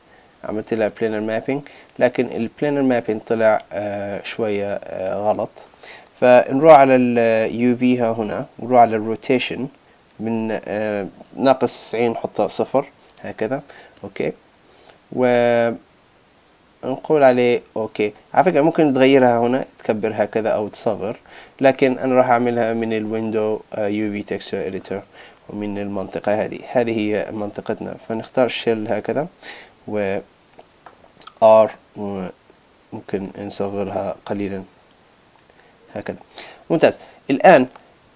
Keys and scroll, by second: 12.6 Return, 21.3 super+z, 30.0 super+z, 34.2 super+z.